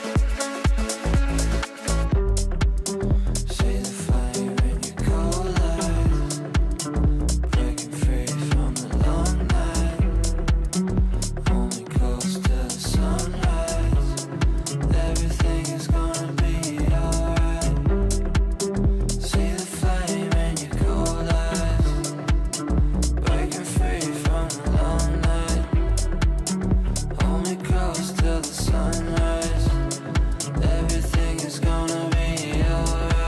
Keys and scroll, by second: 12.0 space, 16.3 space, 19.0 space.